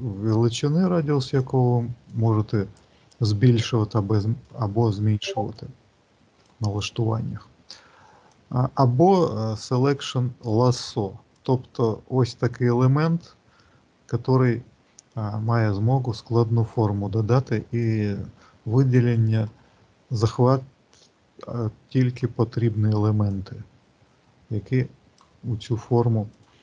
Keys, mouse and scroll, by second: 1.4 click, 2.6 click, 5.5 click, 8.2 click, 11.2 click, 11.6 click, 17.7 click, 23.2 click.